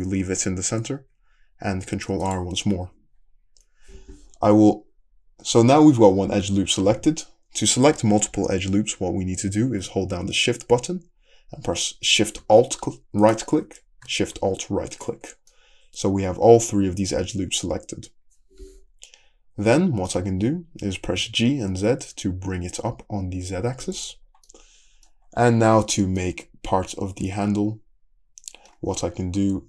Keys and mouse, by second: 1.7 ctrl+r, 13.3 alt+shift+click, 14.0 alt+shift+middle click, 15.0 alt+shift+click, 15.1-16.2 alt+shift+middle drag, 16.2-16.8 drag, 16.8-22.2 middle drag, 21.2 g, 22.2-24.1 shift+drag, 24.1-29.6 middle drag.